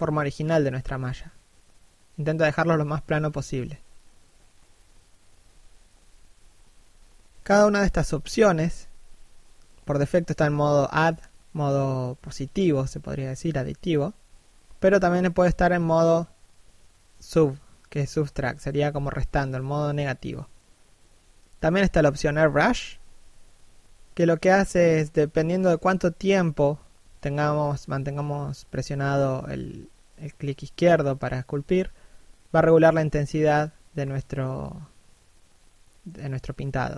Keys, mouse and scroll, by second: 1.4 shift+middle click, 7.9 d, 8.3 f, 8.7 click, 12.0 click, 15.7 middle click, 17.3 1, 20.5 click, 22.5 middle click, 23.7 1, 24.1 click, 24.9 click, 27.1 middle click, 29.5 1, 34.4 d, 35.0 click, 36.1 s, 36.5 click.